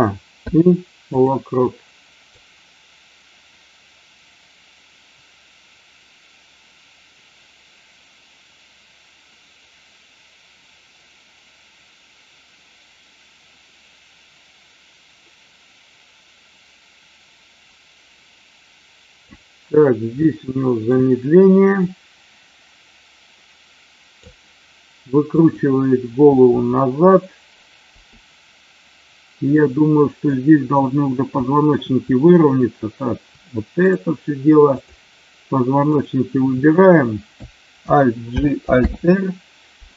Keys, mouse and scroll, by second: 0.4 i, 2.4-19.2 drag, 20.3 shift+middle click, 21.8-24.2 drag, 25.2 click, 29.5 middle click, 31.5 shift+middle click, 33.7 shift+click, 34.7 shift+click, 35.8 shift+click.